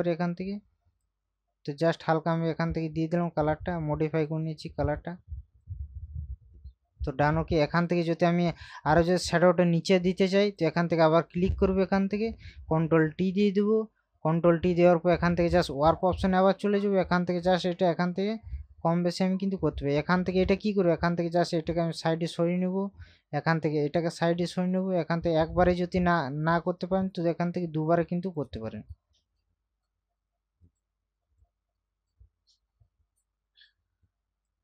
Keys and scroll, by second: 13.2 ctrl+t.